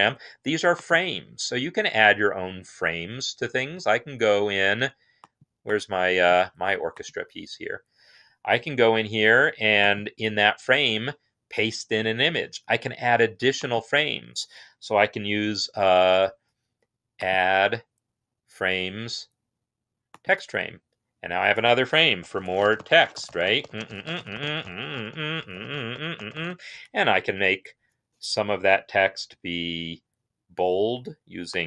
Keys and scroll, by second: 21.8-27.0 typing, 28.2 typing.